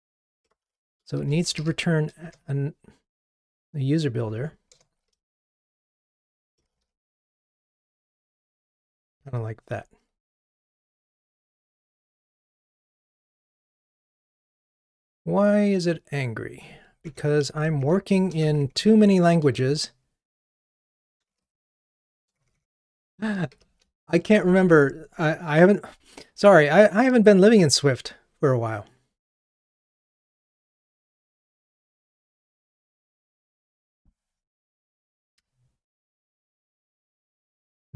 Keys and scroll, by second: 2.2 Return, 9.3 super+s, 35.2 ctrl+Tab, 37.8 alt+Return.